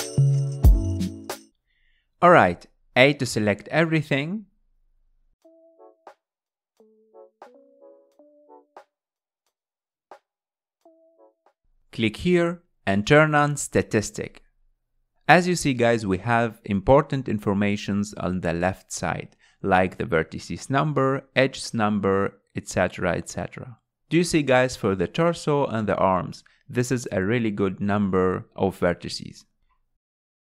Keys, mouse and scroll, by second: 0.2 click, 0.6 scroll down 2, 0.7 middle click, 1.2 scroll down 1, 1.3-3.0 middle drag, 3.0 z, 4.8 a, 5.7 KP_Decimal, 8.6-9.7 scroll down 11, 12.6-15.6 drag, 17.6 click, 17.9 click, 19.8 click, 20.2 z, 20.9 a, 22.8 scroll down 3, 23.1-24.8 middle drag, 24.8 Tab, 25.2 click, 25.6-27.6 shift+middle drag, 27.6 KP_1.